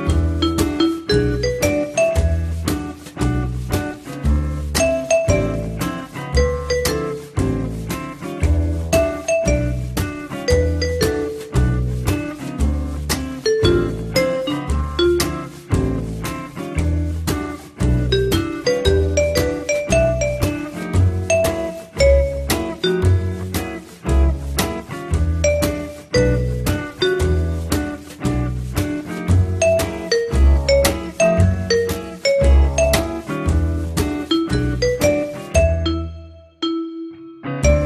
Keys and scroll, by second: 8.7 t, 10.7 e, 15.2 p, 15.7 z, 37.6 t.